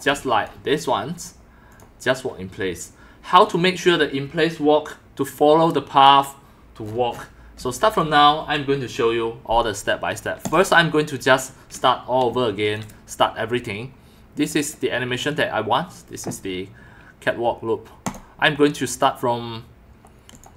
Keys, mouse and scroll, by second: 0.2 x, 1.7 click, 3.4 click, 7.6-8.0 drag, 7.6 x, 10.5 click, 12.3 x, 12.3-12.7 drag, 18.0 click, 20.3 click.